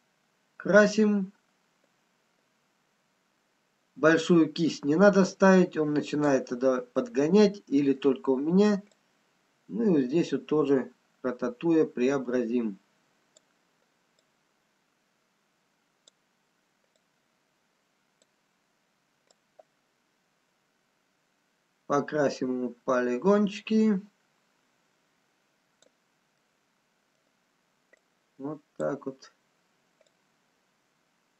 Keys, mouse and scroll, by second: 6.6-7.6 scroll down 2, 7.1 middle click, 8.6-9.4 scroll up 1, 9.4 click, 15.1 click, 19.5 click, 19.5 scroll up 3, 26.8 middle click, 26.8 scroll down 2, 27.6-29.1 scroll down 1, 29.1 click, 29.3-30.6 scroll up 2, 30.6 click.